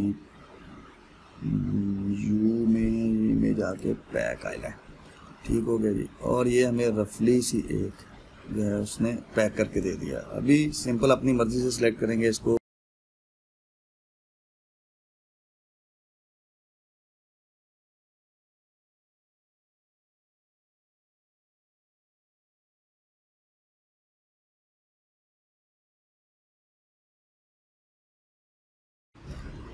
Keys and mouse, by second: 4.4-10.4 drag, 12.5-14.1 typing, 12.7 click, 12.8 click, 13.2 click, 13.5 click, 14.3 click, 14.6 middle click, 14.8 middle click, 14.9 click, 14.9 middle click, 15.1 middle click, 15.2 ctrl+z, 15.3 middle click, 15.3-22.2 typing, 15.5 click, 15.6 middle click, 15.7 click, 15.7 middle click, 15.9 click, 15.9 middle click, 16.1 click, 16.2 middle click, 16.2 ctrl+click, 16.3 middle click, 17.0 Left, 17.6 Left, 18.3 click, 18.5 click, 18.5 click, 18.9 ctrl+z, 19.3 click, 19.4 click, 19.6 click, 19.8 click, 20.7 click, 20.9 click, 21.4 click, 21.4 middle click, 22.0 click, 22.5 click, 22.7 Tab, 22.7 middle click, 22.8 click, 22.8 middle click, 22.9 Tab, 23.0 shift+click, 23.0 middle click, 23.0 Tab, 23.2 click, 23.6-28.7 typing, 23.9 middle click, 24.1 click, 26.1 click, 27.6 click, 28.4 click, 28.4 middle click, 28.5 ctrl+middle click, 28.5 click, 28.6 click, 28.8 click, 29.0 click.